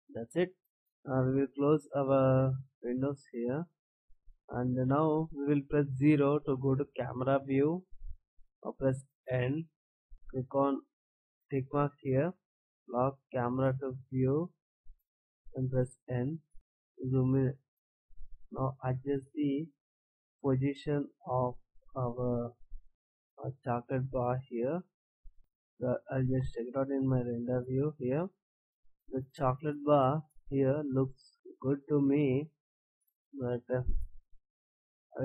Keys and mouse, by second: 2.1-2.6 right drag, 4.1-6.8 middle drag, 6.8 KP_0, 9.2 n, 12.9-14.6 drag, 15.0 n, 15.2 middle click, 15.2 click, 15.5 middle click, 15.6 click, 16.4 middle click, 19.2-21.0 middle drag, 22.8-25.3 middle drag, 27.3 shift+z, 34.5 shift+z.